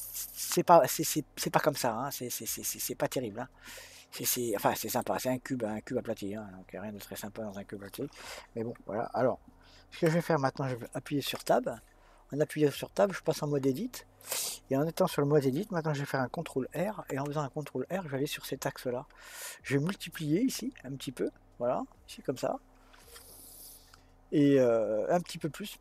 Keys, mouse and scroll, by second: 11.7 Tab, 16.9 ctrl+r.